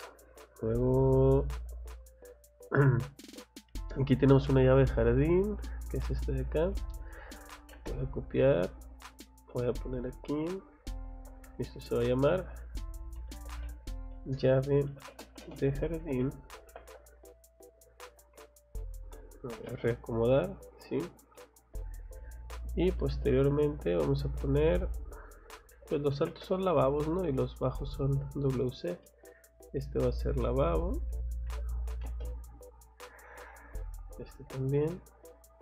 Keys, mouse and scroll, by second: 0.0 scroll up 1, 2.8-3.2 scroll up 2, 3.6-4.1 scroll up 1, 4.1 scroll down 1, 6.4 click, 7.1 c, 7.6 o, 7.7 space, 8.3 click, 8.7 middle click, 10.2 middle click, 10.8 click, 11.1 Escape, 11.4 click, 11.7 click, 13.2-17.4 typing, 17.9 click, 18.2 Escape, 18.5 click, 19.6 m, 19.7 space, 19.8 click, 20.6 click, 21.3 middle click, 22.0 scroll down 2, 22.5 middle click, 22.8 scroll down 2, 24.4 click, 24.8 click, 25.7 c, 26.1 o, 26.3 space, 26.5 middle click, 26.5 scroll up 1, 27.2 click, 27.5 scroll down 1, 29.0 middle click, 30.2 click, 30.6 click, 31.5 c, 31.9 o, 32.0 space, 33.1 click, 34.1 click, 34.3 Escape, 34.5 middle click, 34.8 middle click.